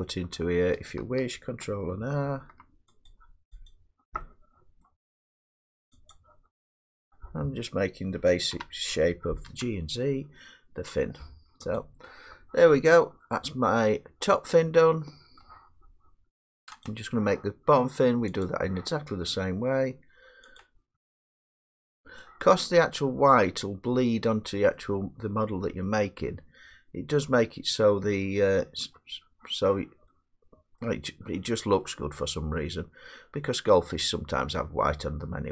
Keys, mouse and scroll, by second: 0.3 middle click, 2.2 ctrl+r, 3.1 click, 3.7 click, 4.8 middle click, 6.1 click, 7.3 middle click, 8.5 g, 9.5 z, 11.8 click, 12.9-13.3 drag, 13.4 click, 13.8 click, 14.2 click, 14.6 click, 15.0 click, 15.4 middle click, 18.4 click, 20.6 click, 21.6 click, 21.9 click, 22.2 middle click, 25.6 middle click, 27.3-32.2 middle drag, 32.8 middle click.